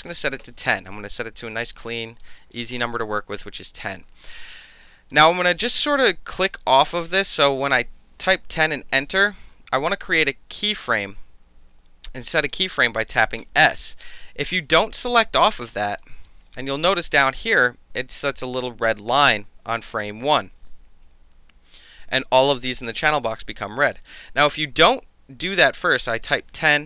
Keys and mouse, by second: 0.0 KP_2, 0.1 KP_0, 0.4 KP_Enter, 1.5 alt+right drag, 2.0 alt+click, 2.6 alt+right click, 2.9-3.5 alt+drag, 4.8 alt+drag, 5.6-6.4 alt+drag, 7.2 click, 8.0 KP_2, 8.1 KP_0, 8.9 KP_Enter, 12.1-12.5 alt+drag, 13.4 s, 16.0 alt+click, 23.9 alt+click, 24.3 ctrl+z, 26.2 click.